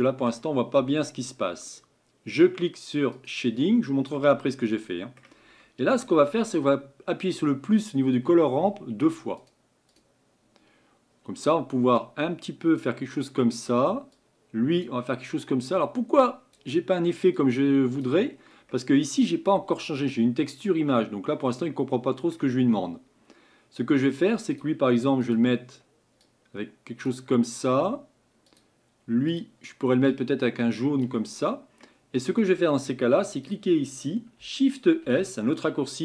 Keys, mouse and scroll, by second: 3.2 click, 21.7-36.0 drag.